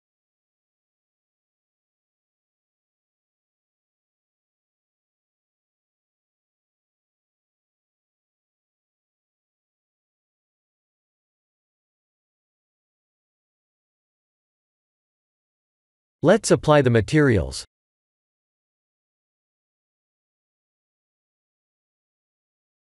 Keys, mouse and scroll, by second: 2.6 middle click, 3.8 click, 4.3 scroll up 4, 6.0 Tab, 6.8 Tab, 7.6-8.0 scroll down 4, 9.8-10.4 scroll down 2, 10.4 Tab, 11.0 Tab, 12.5 KP_3, 13.6 shift+z, 14.1 shift+middle click, 14.7 scroll up 2, 15.2 Tab, 18.7 click, 19.6 click.